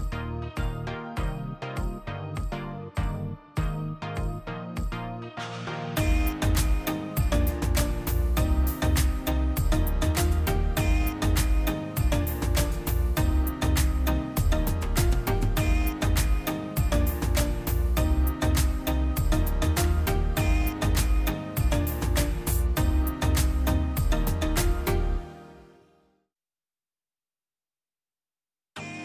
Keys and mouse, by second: 0.0 middle click, 0.4 click, 1.1 ctrl+t, 1.7-2.4 middle drag, 2.4 click, 2.6 drag, 3.5-4.1 middle drag, 4.1 click, 5.9-7.9 middle drag, 7.9 click, 8.4 click, 9.4-10.4 middle drag, 10.4 drag, 11.2 click, 12.3-13.1 drag, 13.5-15.0 drag, 17.0 click, 19.2-20.8 drag, 21.9 click, 23.3 click, 25.6 click, 26.3 click, 27.4 click, 27.8 shift+a.